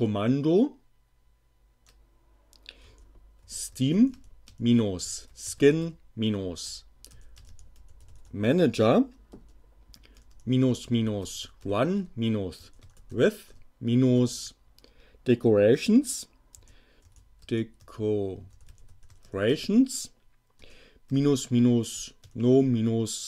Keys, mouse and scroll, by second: 2.9-14.4 typing, 16.2-23.2 typing.